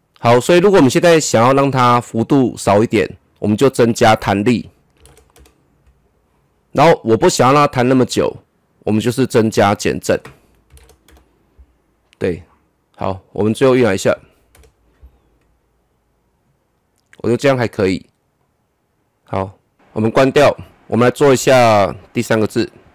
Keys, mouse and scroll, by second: 4.2 click, 5.0 KP_2, 5.3 Return, 10.0 click, 10.7 KP_3, 10.7 KP_0, 11.1 Return, 12.9-14.5 drag, 14.5 KP_0, 18.4-19.7 drag, 19.9 click.